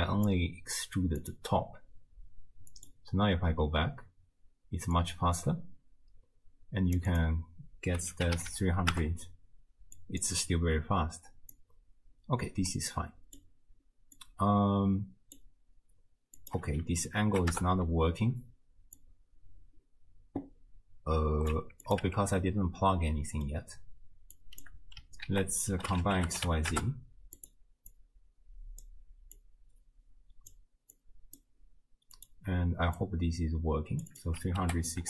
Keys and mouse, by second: 0.3 click, 1.2 click, 2.8 click, 5.0-7.0 drag, 7.1-9.0 drag, 10.0 click, 11.5-13.5 drag, 14.3-15.4 drag, 16.4-17.6 drag, 19.1-21.6 drag, 21.9 click, 22.1 Tab, 22.5 click, 24.4 click, 25.3 ctrl+a, 27.9-28.9 drag, 29.5-30.5 drag, 31.1 click, 32.2 drag, 33.0-34.1 drag, 34.2-35.0 drag.